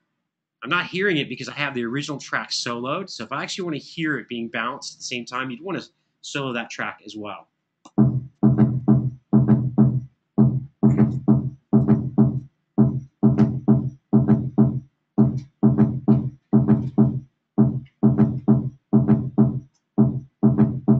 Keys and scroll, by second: 6.3 super+z, 7.5 3.